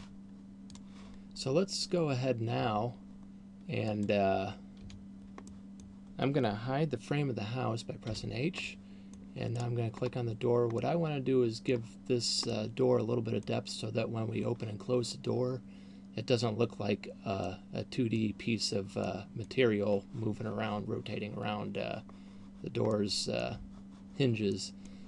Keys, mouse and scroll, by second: 5.1 Escape, 5.1 click, 5.9 middle click, 8.4 h, 9.1 middle click, 10.1 right click, 10.4 scroll up 2, 11.1 middle click, 12.9 middle click, 17.6 middle click, 19.4 middle click, 23.4 middle click, 24.9 middle click.